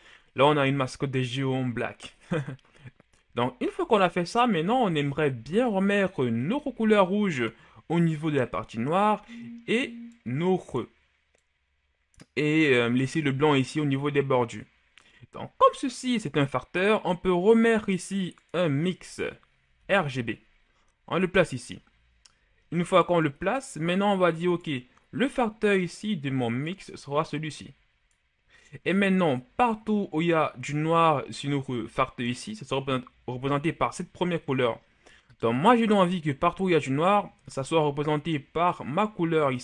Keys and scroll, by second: 19.7 shift+d.